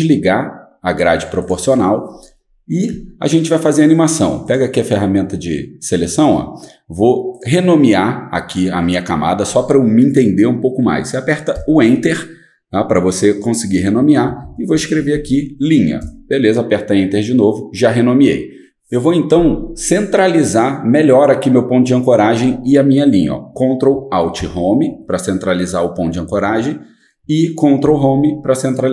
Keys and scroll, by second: 11.5 Return, 14.2-15.8 typing, 16.0 Return, 24.4 ctrl+alt+Home, 27.8 ctrl+Home.